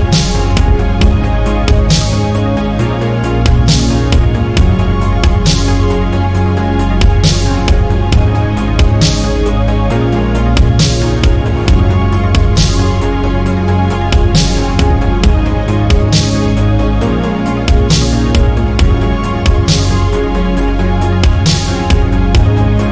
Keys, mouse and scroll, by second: 1.9 alt+click, 2.7 f, 3.8 3, 4.0 click, 4.7 ctrl+KP_Add, 4.9 ctrl+KP_Add, 6.4 KP_Decimal, 7.2 middle click, 7.7-8.6 scroll down 2, 8.6 ctrl+KP_Add, 8.8 ctrl+KP_Add, 9.9-12.0 shift+middle drag, 13.8 shift+d, 15.4 p, 16.1 click, 16.6 Tab, 16.8 drag, 17.1 click, 18.2 click, 18.6 click, 18.9 Tab, 19.4 middle click, 20.0 click, 20.8 ctrl+KP_Add, 20.9 ctrl+KP_Add, 21.6 ctrl+KP_Add, 22.1-22.9 middle drag.